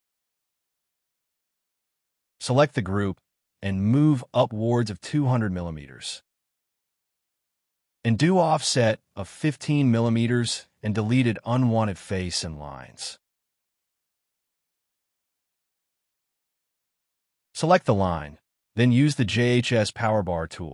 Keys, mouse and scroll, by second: 0.8 middle click, 1.1-1.4 scroll up 2, 1.2 middle click, 2.2 m, 2.8 Up, 3.7 middle click, 4.6 0, 4.7 Return, 4.8 middle click, 5.4 space, 5.5 scroll up 1, 5.8 double click, 6.8 e, 7.5 f, 7.9 ctrl+z, 10.9-12.9 typing, 12.6 double click, 13.2 Delete, 14.2 middle click, 14.4-15.0 scroll down 2, 14.5 l, 15.0 middle click, 15.2 scroll down 1, 15.9 space, 16.0 middle click, 16.8 Delete, 17.2 middle click, 17.4 double click, 19.5 space, 19.7 Escape, 19.8 scroll down 1, 20.3 double click.